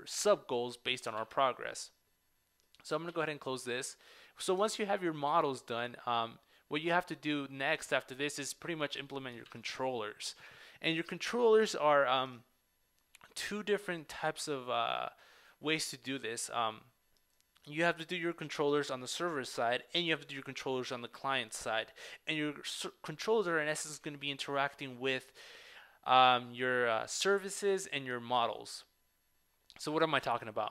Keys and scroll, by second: 1.2 super+Tab, 4.2 super+w, 4.7 super+Tab, 9.5 super+Tab, 12.5 super+Tab.